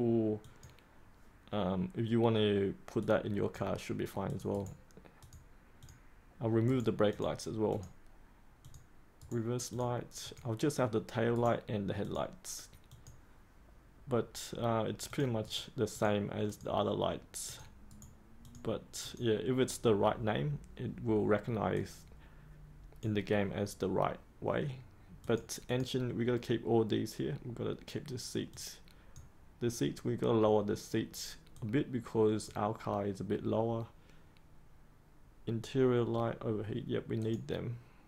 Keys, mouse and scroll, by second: 4.5 right click, 5.1 click, 6.6 right click, 7.1 click, 9.1 right click, 9.6 click, 11.3 right click, 12.0 click, 15.4 right click, 15.9 click, 17.8 right click, 18.4-38.0 drag.